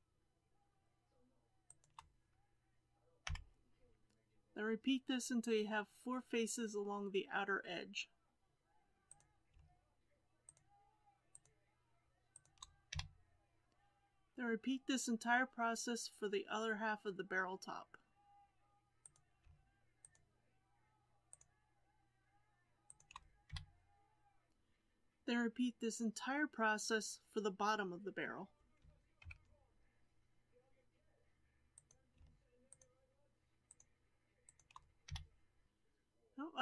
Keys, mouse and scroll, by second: 1.6 shift+click, 3.2 f, 9.0 click, 10.4 shift+click, 11.3 shift+click, 12.3 shift+click, 13.0 f, 13.9 click, 19.0 click, 20.0 shift+click, 21.3 shift+click, 22.8 shift+click, 23.5 f, 24.7 click, 29.1 ctrl+KP_7, 31.7 click, 32.6 shift+drag, 33.6 shift+click, 34.4 shift+click, 35.0 f.